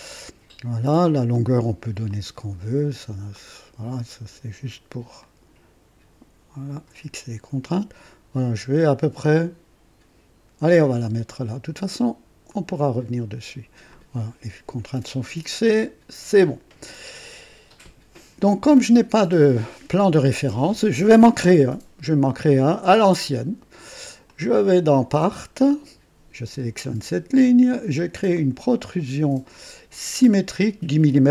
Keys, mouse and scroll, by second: 1.3 click, 2.1 click, 3.3 click, 5.2-10.9 drag, 12.5 click, 13.9 click, 15.6 click, 18.7 click, 25.5 click, 26.8 click, 28.3 click, 30.1 click.